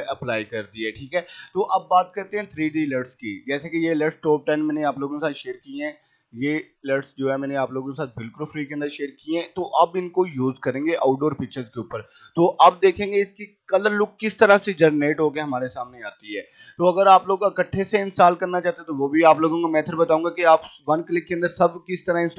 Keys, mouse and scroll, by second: 2.9 click, 5.4 click, 7.4 right click, 7.7 click, 17.3-19.8 drag.